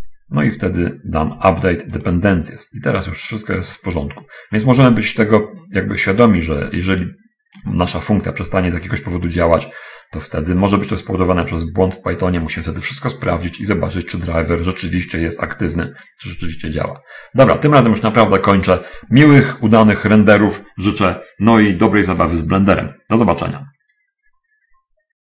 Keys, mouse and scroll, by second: 2.0 click, 4.2-8.0 drag, 16.0 click.